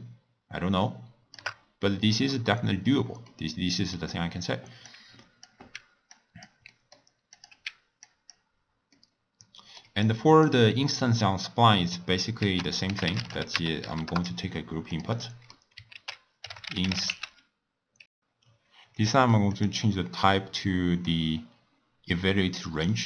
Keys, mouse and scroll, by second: 3.3-4.9 middle drag, 4.9 click, 5.8 x, 6.2 click, 6.7-7.4 middle drag, 7.4 click, 7.7 x, 8.0 click, 8.5 scroll down 1, 8.8 scroll up 1, 9.0-10.0 middle drag, 10.0 click, 10.7-12.4 middle drag, 12.4 ctrl+a, 15.2 middle click, 16.0 ctrl+a, 19.7 click, 20.5-22.5 drag, 22.5-23.0 middle drag.